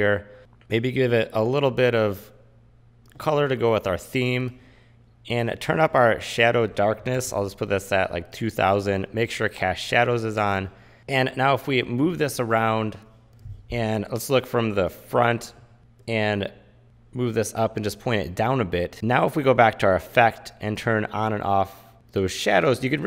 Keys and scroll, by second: 7.2 KP_2, 12.2 v, 13.3 super+=, 15.8 v.